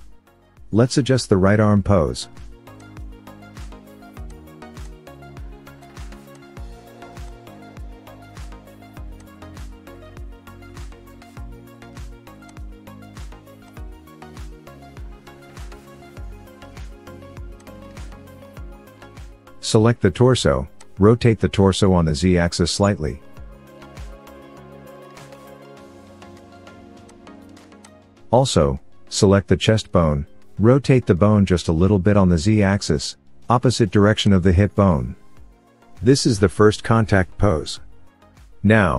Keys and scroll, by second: 5.1 r, 6.7 r, 7.7 KP_1, 18.0 KP_1.